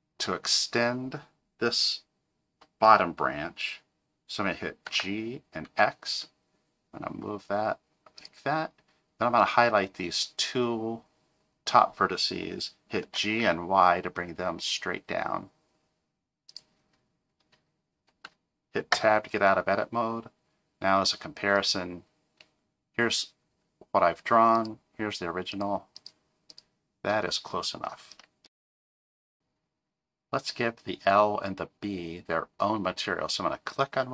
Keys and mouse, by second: 4.9 g, 9.4 click, 13.0 g, 18.9 Tab, 21.5 click, 24.6 click, 25.5 click, 26.0 click, 26.5 click.